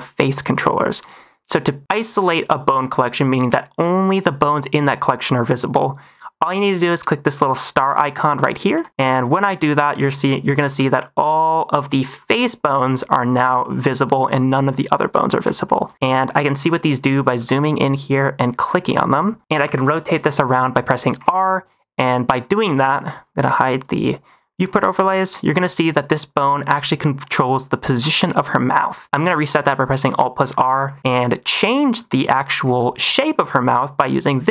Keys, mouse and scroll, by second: 0.7 shift+middle click, 2.6 click, 8.7 click, 10.9-12.0 middle drag, 12.8 shift+middle drag, 13.1-14.0 middle drag, 14.6 shift+middle drag, 14.8 shift+middle drag, 15.6 shift+middle drag, 15.9 middle click, 17.0 middle click, 17.3 shift+middle drag, 18.5 click, 18.8 click, 19.2 shift+middle click, 21.1 r, 21.2 r, 22.2 click, 23.7 click, 24.5 r, 24.7 r, 29.0 alt+r, 30.4 -, 31.1 click, 32.2 middle click, 32.7 shift+middle drag, 33.1 middle click, 34.0 click.